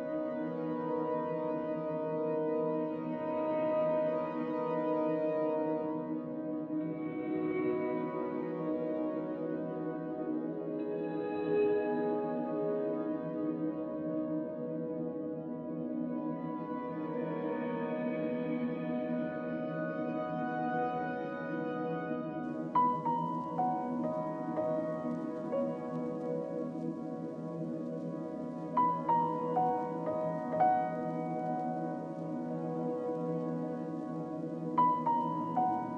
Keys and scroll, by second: 0.3 z, 2.3 z, 6.1 b, 20.0 z, 23.8-25.3 typing, 27.8 e, 30.0 z, 31.5 z, 31.5 ctrl+alt+1, 31.8 ctrl+alt+1, 31.8 b.